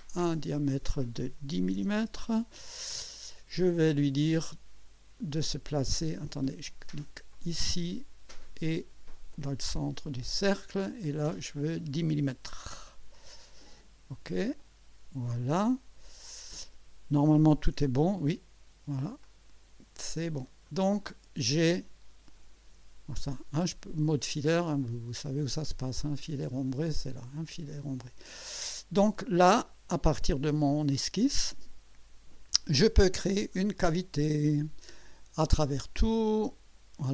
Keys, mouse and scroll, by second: 0.2 click, 1.6 KP_1, 1.7 KP_0, 2.0 Return, 5.2 click, 6.3 click, 7.3 click, 10.2 click, 11.6 click, 12.3-13.2 typing, 14.6 click, 19.2 click, 20.6-21.5 drag, 25.1 click, 26.5 click, 28.0 click, 30.2 click, 30.9-32.1 drag, 33.5 click, 34.5 click, 35.7 click, 36.3 click, 37.0-37.1 drag.